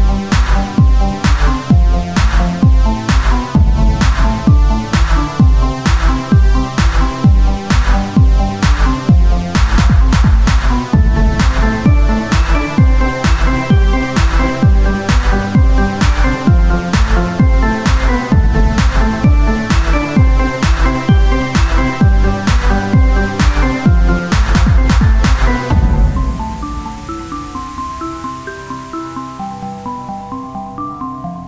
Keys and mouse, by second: 0.0 click, 0.6 KP_0, 2.0 shift+q, 14.2-25.4 drag, 25.4-28.4 right drag.